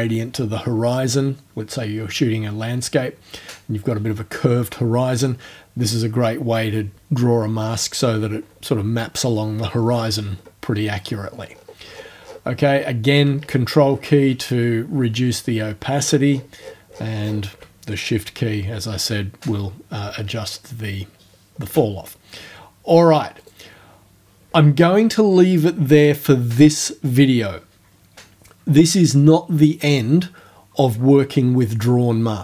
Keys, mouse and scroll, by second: 9.7-10.2 scroll down 2, 10.4 scroll down 2, 11.2-12.2 scroll down 6, 13.4-13.8 ctrl+scroll up 1, 13.9-14.2 ctrl+scroll up 1, 15.0-15.5 ctrl+scroll down 2, 15.9-17.5 ctrl+scroll down 10, 19.7-20.7 scroll up 4, 20.9-21.2 shift+scroll down 2, 23.4 right click.